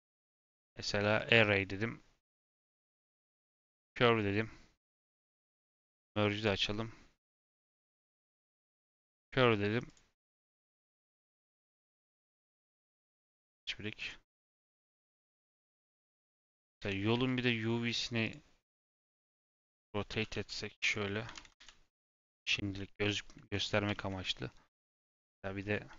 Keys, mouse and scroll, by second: 0.2-5.7 drag, 6.3-9.3 drag, 9.8 click, 12.5 click, 14.6-14.9 scroll down 2, 14.9 middle click, 15.6-15.9 scroll down 2, 15.9 shift+middle click, 16.8 Tab, 17.1 a, 18.2-19.2 drag, 19.7 scroll down 1, 19.8 middle click, 20.1 a, 21.8 Tab, 22.7-24.7 middle drag, 24.7 scroll up 3, 25.3 middle click.